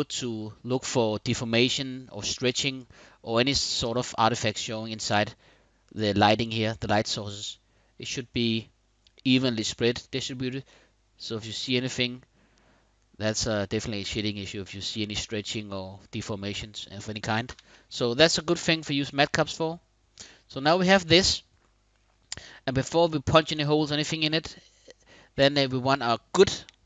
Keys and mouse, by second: 4.9-15.6 middle drag, 16.3 middle click, 17.1 KP_1, 17.6 KP_5, 20.6 click.